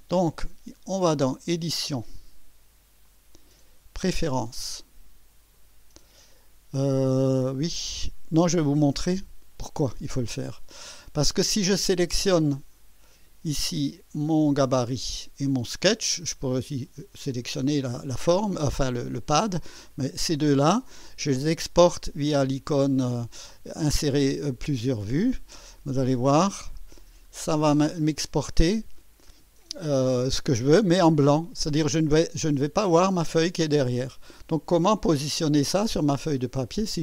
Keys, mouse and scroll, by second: 3.1 click, 5.6 click, 8.4 Escape, 13.1 click, 20.0 ctrl+click, 25.0 click, 26.5 click, 27.2-28.0 scroll down 2, 32.5-34.4 drag.